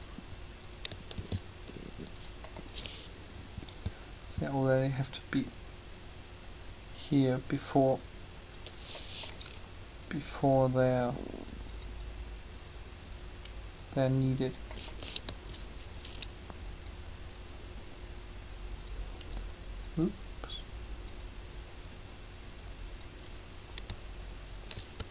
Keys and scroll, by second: 1.1 shift+d, 24.9 shift+g.